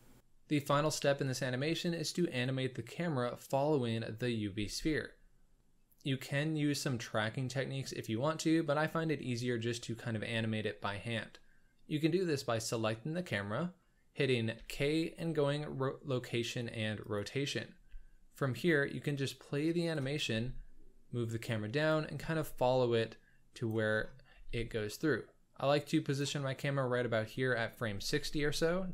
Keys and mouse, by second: 4.5 z, 14.5 k, 17.7 z, 18.8-19.9 drag, 20.2 g, 22.9 click, 23.7 click, 24.3 g, 28.2 k.